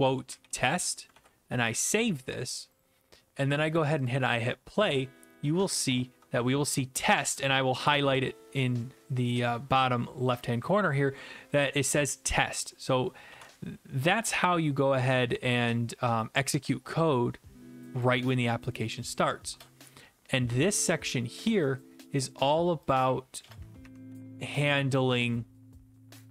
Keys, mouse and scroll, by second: 0.0-1.0 typing, 1.1 ctrl+s, 2.8 click, 4.1 click, 13.3 alt+F4, 18.0 click, 19.5 BackSpace, 22.9 click, 23.4 BackSpace, 24.1 Delete.